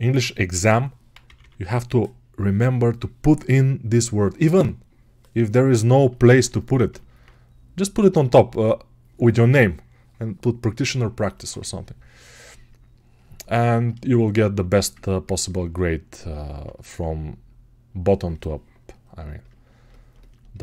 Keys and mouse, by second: 5.6-16.3 alt+right drag.